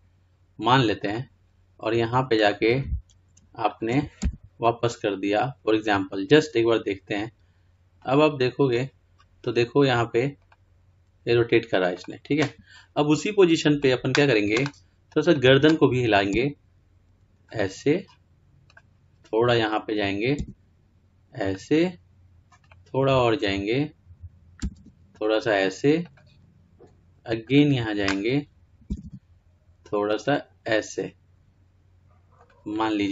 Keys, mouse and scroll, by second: 1.3-6.0 drag, 6.0 r, 8.4-17.8 drag, 17.8 r, 19.1-21.6 drag, 21.6 r, 22.9-26.2 drag, 26.2 r, 27.7-31.7 drag, 31.7 r.